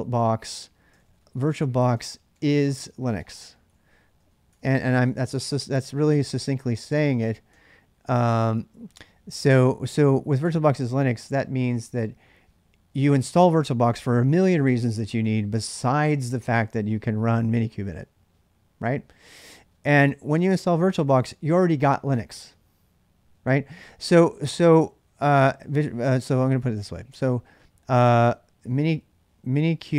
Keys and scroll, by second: 0.9-8.4 typing, 25.6-29.9 typing.